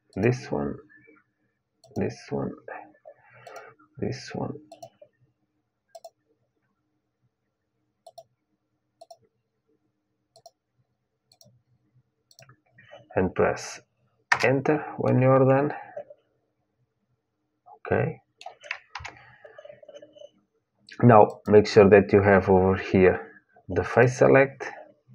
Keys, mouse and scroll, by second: 14.8-17.0 middle drag, 18.6 KP_1, 21.0-23.0 drag, 23.6-25.1 drag.